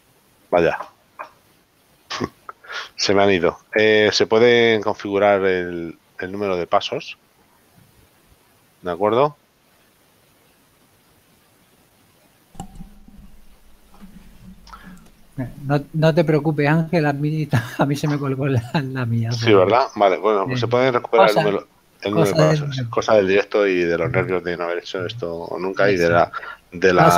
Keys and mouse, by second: 2.8 click, 13.5 click, 15.1 click, 18.8 KP_Decimal, 22.8 middle click.